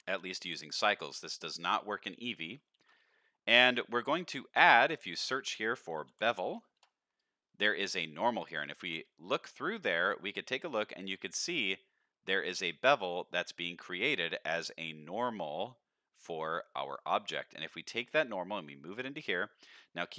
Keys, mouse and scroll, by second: 0.0 ctrl+s, 0.5 click, 0.9 shift+middle click, 2.2 middle click, 2.7 shift+a, 8.6 ctrl+shift+click, 9.4 scroll up 1, 9.8-10.1 middle drag, 10.4 shift+middle drag, 10.9-12.4 scroll up 2, 13.0 middle drag, 16.2 scroll down 3, 16.7 middle click, 17.2 middle click, 18.1-18.9 drag, 19.5 middle click.